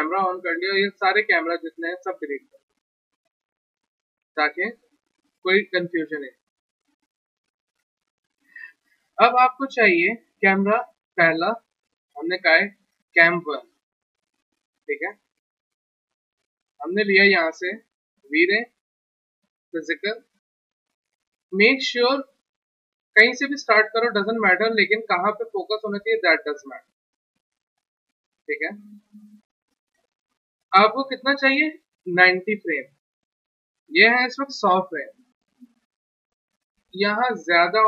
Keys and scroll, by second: 2.7 Delete, 5.1 Delete, 12.3 alt+Tab, 15.3 alt+Tab, 26.7 w.